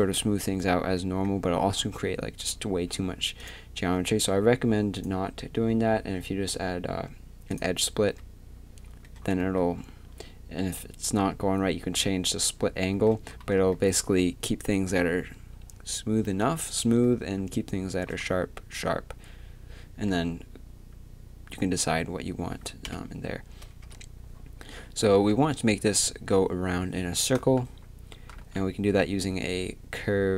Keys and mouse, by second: 3.4-7.6 drag, 7.6 middle click, 22.8 KP_7, 23.8 KP_3, 25.1 z, 28.4 shift+a.